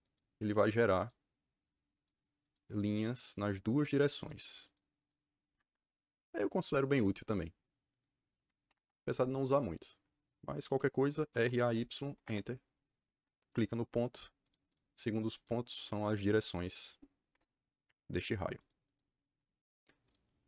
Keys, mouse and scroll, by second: 0.4 click, 0.9 click, 1.9 click, 2.4 click, 2.9 click, 3.7 click, 4.1 click, 4.6 click, 4.9 click, 5.4 Escape, 7.2 click, 7.8 click, 11.0-11.8 typing, 12.1 Return, 13.4 click, 13.9 click, 14.4 click, 14.6 click, 14.8 click, 15.2 click, 15.6 click, 15.8 click, 16.1 click, 16.3 click, 17.2 KP_Enter, 18.5 click, 18.8 click.